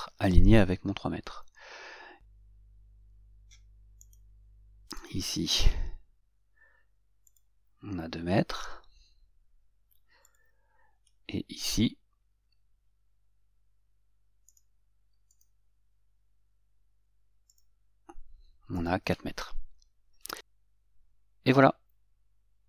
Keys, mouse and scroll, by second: 4.3 right click, 5.3 click, 10.5 click, 14.8 right click, 17.8 click.